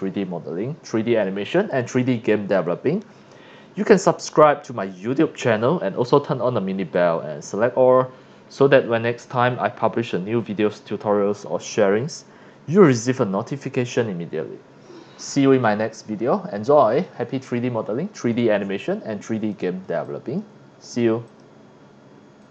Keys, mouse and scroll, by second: 16.9 click, 17.5 scroll up 1, 17.8-18.3 scroll down 2, 18.9 click, 18.9 s, 19.4 c, 19.5 click, 20.0 drag, 21.3 click, 22.4 click.